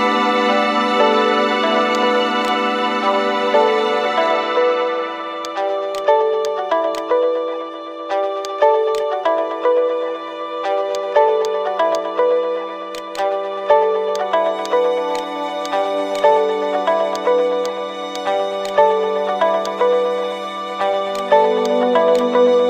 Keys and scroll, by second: 6.6 Return.